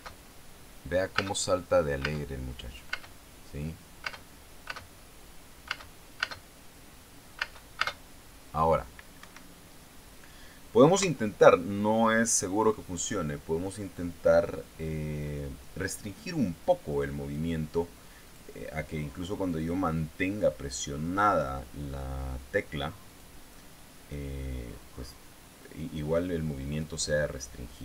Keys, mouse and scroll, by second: 0.4 space, 1.7 space, 2.5 space, 3.5 space, 4.6 space, 6.2 space, 7.9 space, 9.7 Escape, 11.5 KP_0, 15.9-18.1 drag, 18.8 click, 23.6 click.